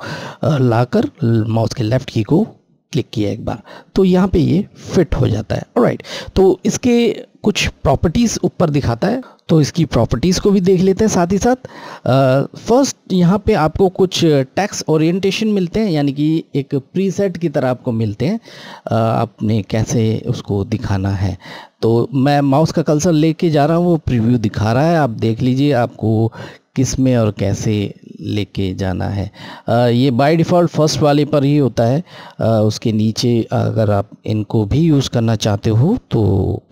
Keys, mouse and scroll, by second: 14.9 click.